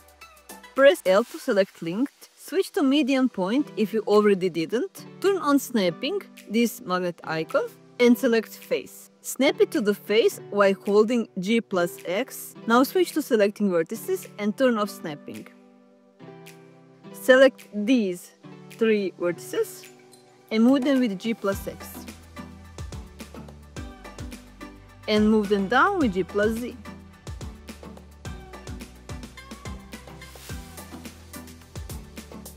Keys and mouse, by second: 0.8 click, 1.2 l, 1.6 l, 4.0-4.8 drag, 5.7-6.7 drag, 7.4 click, 8.8 g, 9.2 x, 9.7 click, 11.3 1, 12.2 click, 13.1 shift+click, 14.5 shift+click, 15.0 middle click, 17.2 g, 18.4 x, 20.9 click, 22.1 g, 22.3 x, 24.2 click, 26.9 g, 27.1 z, 28.4 click, 30.4 g, 30.6 z.